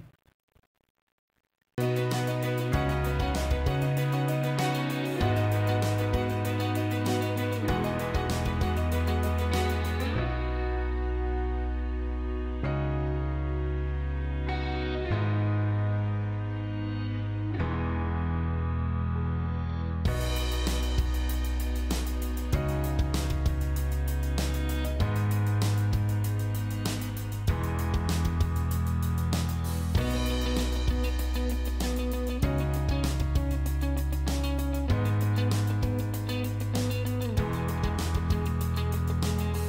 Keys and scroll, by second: 8.7 g, 15.4 Delete, 23.7 F11.